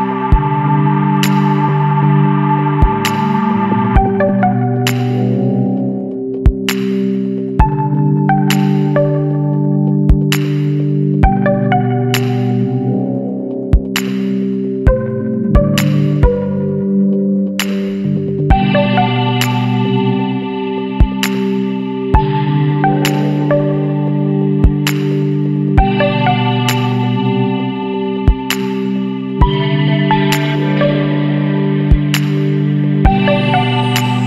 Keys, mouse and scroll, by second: 0.4-0.9 scroll down 2, 0.9 Tab, 2.2 click, 6.0 middle click, 6.5 s, 9.3-10.1 middle drag, 10.1 ctrl+s, 10.4-11.0 scroll down 2, 11.0-11.4 shift+middle drag, 11.4 alt+a, 11.7-12.3 middle drag, 12.3 click, 12.5 Tab, 13.8 alt+a, 14.5 alt+shift+click, 15.4 KP_Decimal, 16.2 scroll up 1, 16.5-18.8 middle drag, 18.8 shift+d, 20.9 p, 21.6 Tab, 22.1 click, 22.5 click, 23.6-26.2 right drag, 26.2 Tab, 26.4 scroll down 1, 26.6-27.4 middle drag, 27.4 Tab, 28.0 scroll down 2, 28.1 scroll up 1, 28.3-28.7 middle drag, 28.7 shift+scroll down 1, 28.9-30.0 shift+middle drag, 30.0 click, 30.5-32.4 middle drag, 32.4-33.4 scroll up 2, 32.5 Tab, 33.4 Tab.